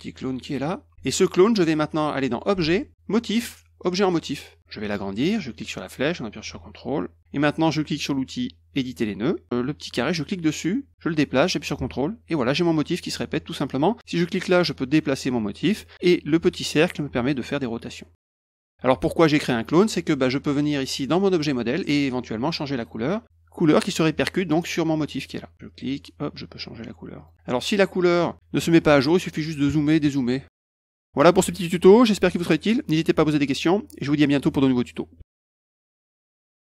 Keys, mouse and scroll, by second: 2.3 click, 4.0 click, 5.6-7.2 drag, 8.8 click, 10.3-13.1 drag, 14.2-15.6 drag, 17.3-18.6 drag, 20.2 middle click, 21.2 click, 22.8 click, 25.7 click, 26.8 click, 27.2 click, 27.7 click, 28.2 middle click, 28.2 scroll up 1.